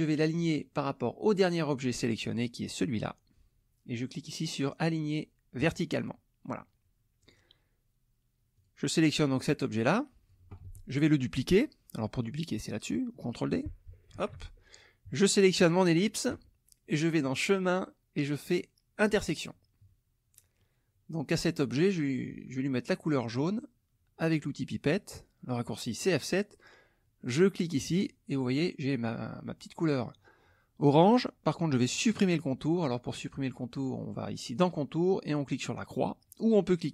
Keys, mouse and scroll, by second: 5.6 click, 7.2 click, 8.5 click, 9.3-10.5 drag, 10.6 ctrl+z, 14.1 ctrl+d, 15.6 shift+click, 17.2 click, 18.9 click, 19.8 KP_Subtract, 20.6 click, 21.6 middle click, 26.0 click, 27.9 click, 34.5 click.